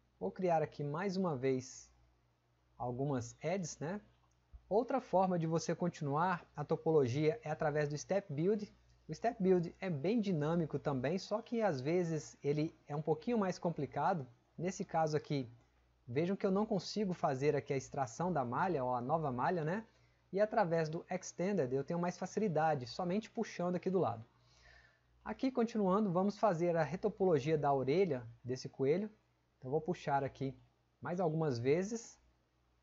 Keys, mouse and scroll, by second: 3.8 click, 25.3 click.